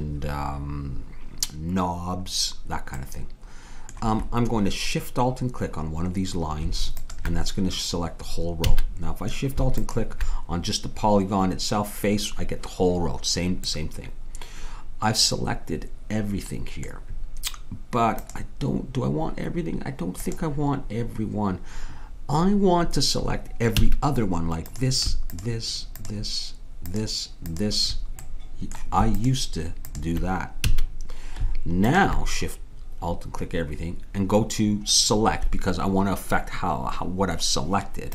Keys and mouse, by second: 7.0-11.5 drag, 8.7 a, 13.6 middle click, 23.8 a, 24.6-31.5 drag, 30.7 a, 31.6 click, 31.9-33.8 drag.